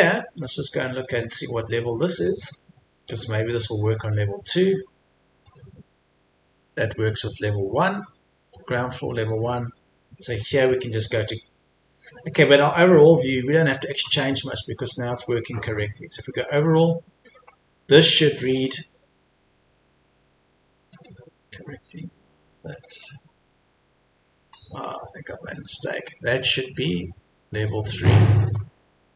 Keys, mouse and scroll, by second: 0.9 click, 12.7-13.7 scroll up 1, 13.7 click, 14.3-15.1 scroll up 1, 15.1 click, 17.4-17.8 scroll up 1, 18.5 click, 19.1-19.6 scroll down 1, 21.3 click, 21.5-22.7 scroll down 1, 22.7-24.0 drag, 25.5 click, 28.5-29.1 scroll up 1.